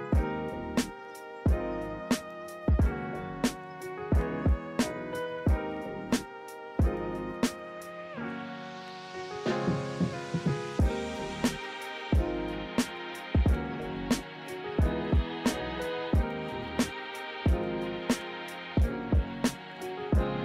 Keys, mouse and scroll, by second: 6.4 ctrl+z, 8.9 ctrl+-, 18.9 ctrl+=.